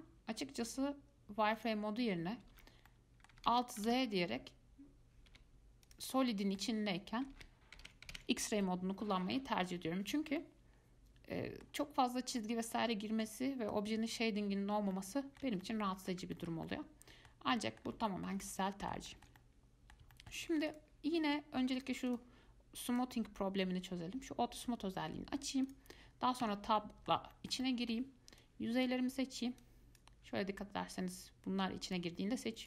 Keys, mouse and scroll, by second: 1.8 click, 2.7 alt+z, 3.1-3.7 middle drag, 3.7 alt+z, 4.1 alt+z, 5.5 z, 6.5-7.5 middle drag, 7.5 alt+z, 8.0 alt+z, 8.8-13.9 middle drag, 13.9 click, 15.1-16.6 middle drag, 16.9-20.6 middle drag, 20.6 scroll down 1, 20.9 click, 21.5 Tab, 22.0 click, 22.3 click, 23.1 click, 25.9 click, 26.6 Tab, 27.0-28.6 middle drag, 28.6 click, 29.8 click, 31.2 click.